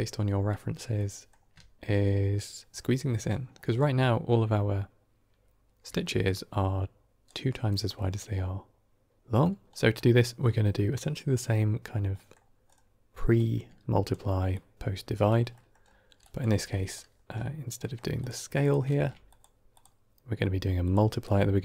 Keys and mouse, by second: 0.8-1.3 middle drag, 5.8 d, 6.1-7.2 drag, 7.1 d, 7.2 d, 9.7 middle click, 10.4 middle click, 12.2 middle click, 13.3-14.1 drag, 14.4-15.2 drag, 15.4 middle drag, 16.2 drag, 16.5 g, 17.8 middle click, 18.5 click, 18.8 shift+d, 19.7-20.8 drag, 21.2-21.6 drag.